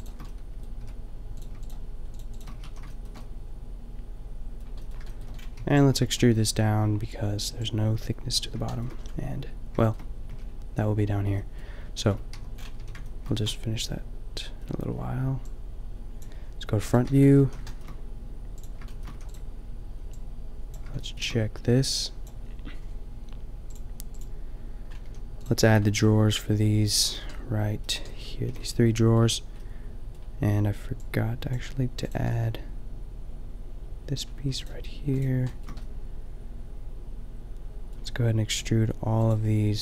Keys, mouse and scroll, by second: 0.4 middle click, 0.8 f, 2.6 f, 2.7 a, 5.6 b, 8.3 click, 10.4 a, 12.2 Tab, 12.8 a, 17.0 Tab, 17.3 a, 18.5 middle click, 19.2 a, 23.2 shift+middle click, 25.0 a, 28.5 a, 31.0 drag, 32.4-34.2 middle drag, 35.5 middle click, 36.6 middle click, 37.1 middle click.